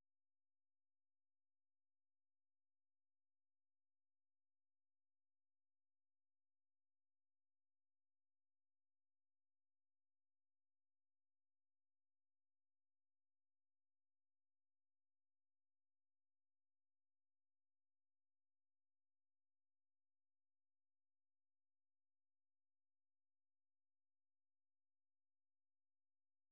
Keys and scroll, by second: 4.4 alt+Tab, 5.1 alt+Tab, 7.7 Up, 8.1 Up, 9.1 Up, 9.7 Down, 9.9 Return.